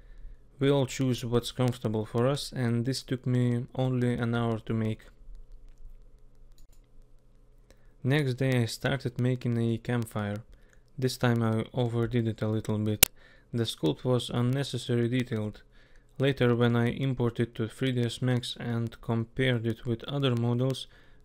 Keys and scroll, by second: 1.6 k, 3.1 k, 6.1 k.